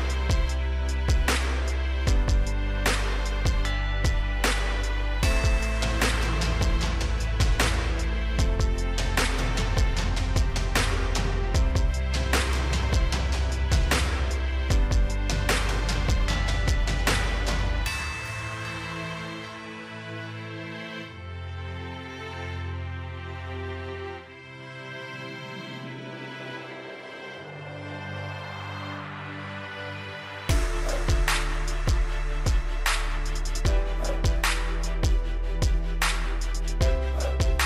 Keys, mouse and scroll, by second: 1.7 right click, 2.5 click, 7.4 8, 8.0 Return, 9.5 click, 10.0 right click, 10.6 click, 11.2-12.1 scroll up 1, 12.1-12.8 scroll down 1, 12.8-27.2 drag, 29.9-32.0 scroll down 1, 33.1-34.7 scroll up 1, 34.7 scroll down 1, 34.9 click.